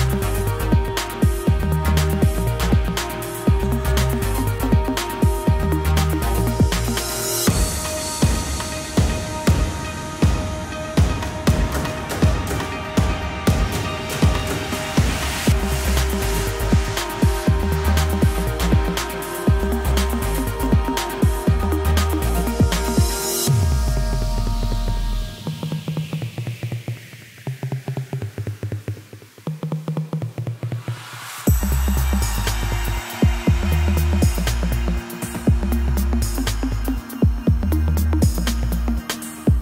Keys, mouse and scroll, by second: 0.2 k, 11.1-12.0 scroll down 4, 12.0 y, 12.3 g, 13.4-14.4 scroll down 2, 14.4 click, 14.5 b, 15.5 Delete, 15.7 scroll up 1, 15.8-16.1 scroll down 1, 16.1 shift+middle drag, 16.4-16.9 scroll up 5, 16.9 shift+middle drag, 17.1-17.5 scroll up 4, 17.5-18.6 shift+middle drag, 18.6 k, 20.5 click, 22.0 Delete, 22.2-22.7 scroll down 5, 22.7-23.3 shift+middle drag, 23.3-24.0 scroll down 1, 24.0 shift+middle drag, 24.2-24.5 scroll up 5, 24.5-25.0 shift+middle drag, 25.0 Tab, 25.0 click, 25.2 Tab, 26.4 k.